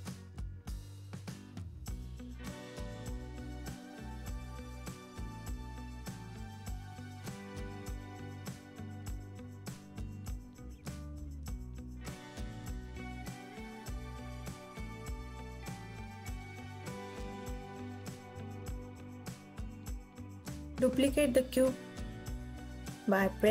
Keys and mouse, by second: 2.6 click, 4.1 ctrl+r, 5.9 click, 6.5 g, 7.8 click, 9.3 click, 9.7 g, 12.0 click, 12.8 Tab, 13.6 KP_1, 15.5 s, 16.3 x, 17.7 click, 18.4 alt+z, 19.5 ctrl+s, 19.8 KP_1, 22.7 click, 23.4 shift+d.